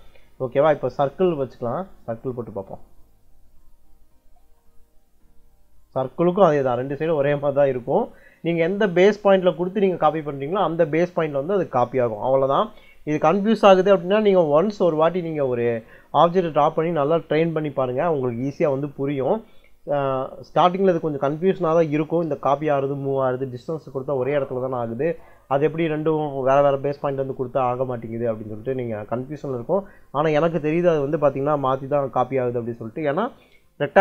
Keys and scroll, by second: 0.8 c, 1.1 space, 4.1 l, 4.3 space, 6.4 Escape.